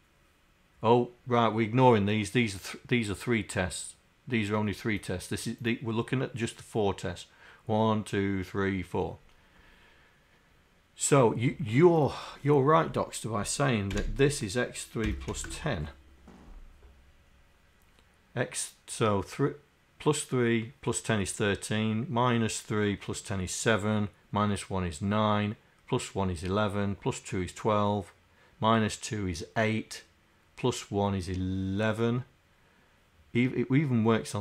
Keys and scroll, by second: 13.9 Delete, 14.0 3, 15.3 KP_1.